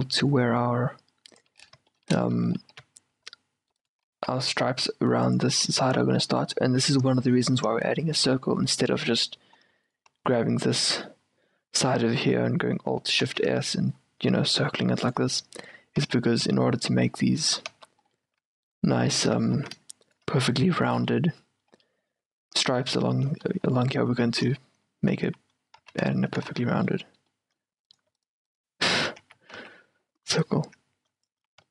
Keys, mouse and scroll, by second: 1.7-4.7 middle drag, 2.8 g, 4.3 s, 6.4-10.0 middle drag, 10.0-11.2 right drag, 10.6 z, 11.2-13.4 middle drag, 13.4 alt+shift+s, 15.7-18.5 typing, 18.2-26.4 middle drag, 19.7 s, 25.4 a, 25.9 z, 26.6 z, 26.9-29.3 middle drag, 28.0-29.3 drag, 28.0-31.4 right drag, 29.3 q, 29.7 z, 30.5-31.7 drag, 31.6 a.